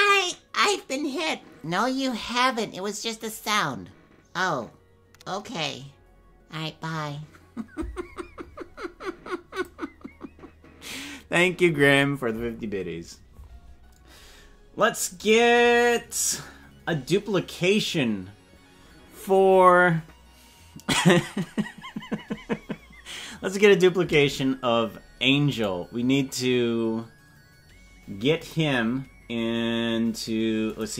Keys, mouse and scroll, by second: 15.2 click, 28.4 click, 30.7 click.